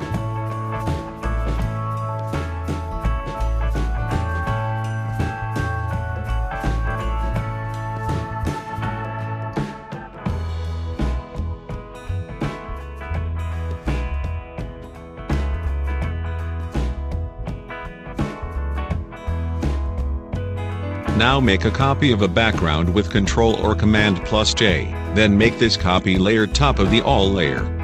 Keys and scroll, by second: 14.0-15.2 typing, 15.2 Return, 23.5 ctrl+j.